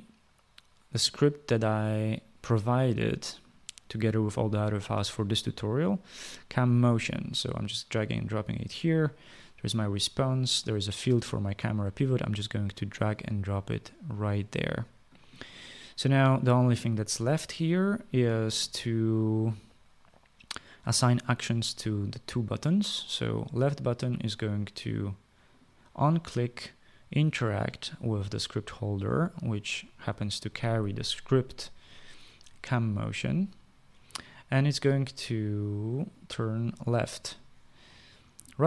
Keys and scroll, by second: 18.6 ctrl+s.